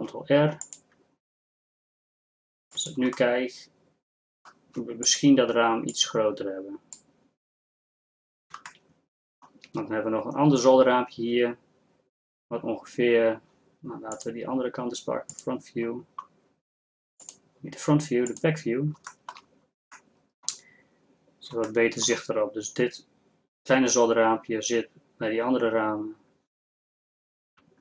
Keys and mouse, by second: 0.0 ctrl+r, 5.1-6.1 middle drag.